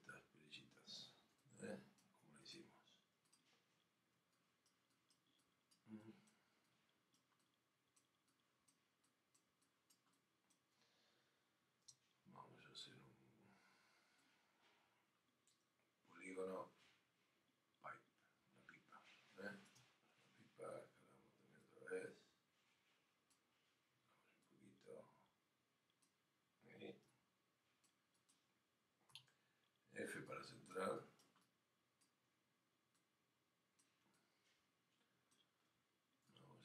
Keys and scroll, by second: 1.3 alt+f.